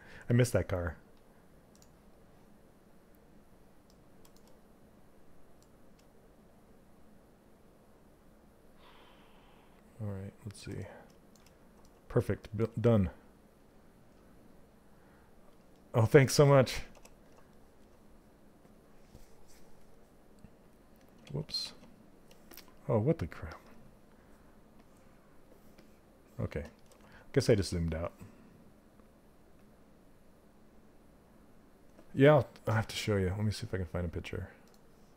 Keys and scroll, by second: 16.5 w, 20.8 ctrl+z.